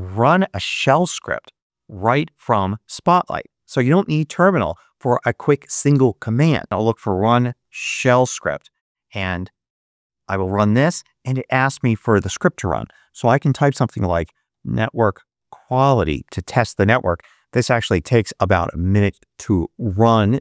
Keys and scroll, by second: 6.4-7.8 typing, 9.7 Return, 13.1-16.3 typing, 19.3 Return.